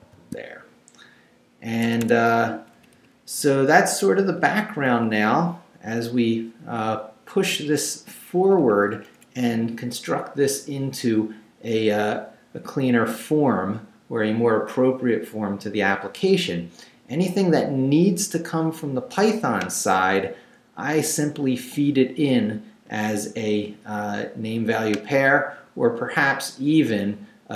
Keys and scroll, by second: 0.0 shift+v, 1.8 Escape, 2.4 Down, 4.4 Up, 7.4 Down, 8.4 Up.